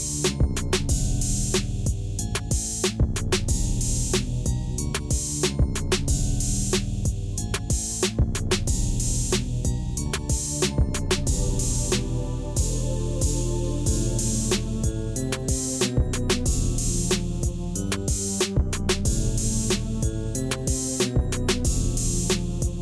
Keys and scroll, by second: 5.3 e, 7.4 2, 8.1 Return, 15.2 shift+a, 15.8 c, 16.3 o, 16.5 l.